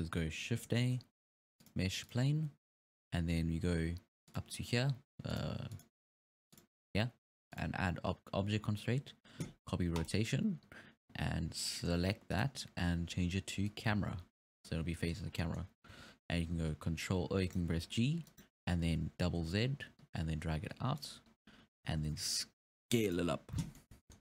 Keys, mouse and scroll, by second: 0.8 shift+a, 2.1 shift+a, 4.3 click, 5.4 click, 5.7 click, 6.5 click, 7.5-10.6 drag, 11.6 scroll down 3, 11.8 middle click, 12.3-14.1 drag, 14.1-15.3 scroll up 6, 15.3 scroll down 5, 15.4-16.0 middle drag, 16.0 g, 17.7 g, 18.9 g, 21.3 scroll down 2, 22.0 s, 23.6 scroll down 3, 23.8-24.2 middle drag.